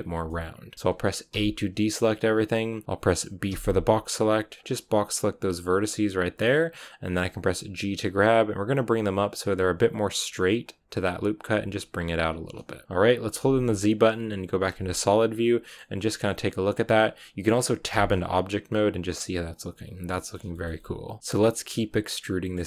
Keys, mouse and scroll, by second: 0.2-1.2 shift+middle drag, 1.2 a, 5.5 b, 7.1 g, 11.2 g, 12.0-14.6 scroll down 8, 14.6 z, 14.8-17.8 middle drag, 17.8 Tab, 18.0-22.6 middle drag.